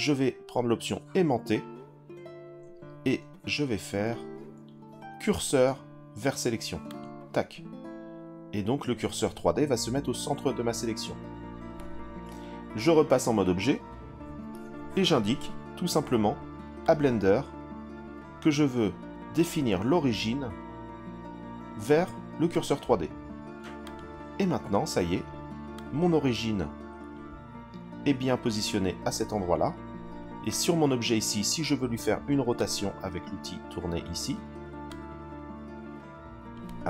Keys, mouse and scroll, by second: 12.9 Tab, 16.8-22.6 right drag, 23.8 click, 25.7 click, 26.1-27.2 drag, 26.8 i, 30.5 click, 32.6 click, 34.9 click.